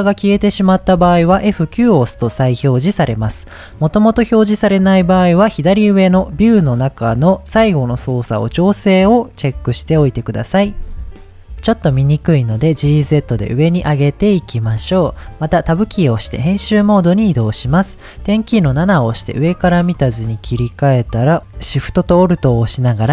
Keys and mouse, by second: 0.4 click, 1.6 F9, 6.7-10.8 drag, 10.9 click, 11.4 click, 12.9 g, 13.1 z, 14.4 click, 14.9-15.2 shift+middle drag, 15.7 Tab, 18.6 KP_7, 19.8 shift+middle click.